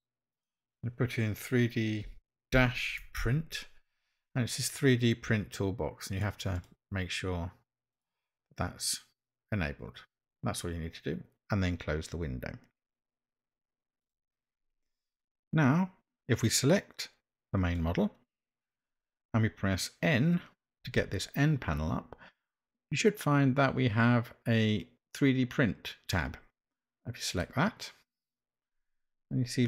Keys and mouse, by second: 17.6 click, 20.9 n, 27.2 click.